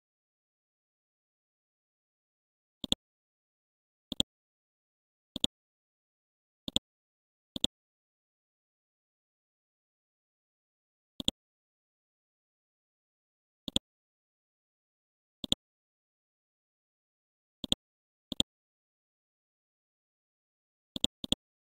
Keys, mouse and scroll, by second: 1.4 scroll down 1, 2.8-3.8 drag, 5.9-6.7 scroll down 1, 6.7-8.9 drag, 8.9-10.0 scroll up 1, 10.3 Home, 11.2-15.0 drag, 15.7 right click, 16.1 Down, 17.1-17.6 scroll down 1, 17.6 click, 19.1-19.6 scroll up 1, 19.6-20.3 scroll down 1, 20.3-20.8 scroll down 1, 20.9 click.